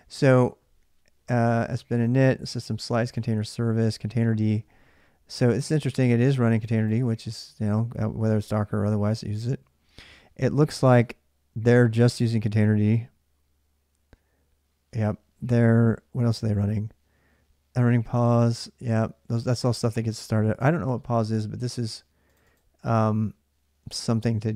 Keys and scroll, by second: 16.0 space.